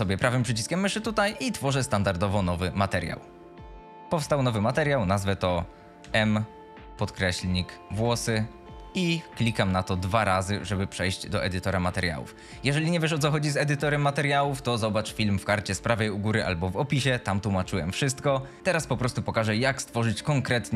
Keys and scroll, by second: 6.2 shift+m, 7.6-8.7 typing.